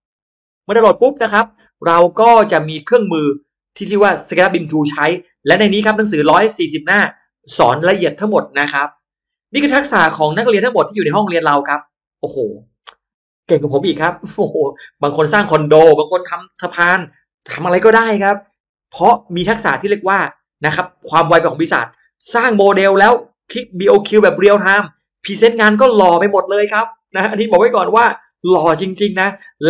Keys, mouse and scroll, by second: 1.8 click, 9.6 middle click, 11.1 click, 20.1 click, 22.3 click, 23.1 click.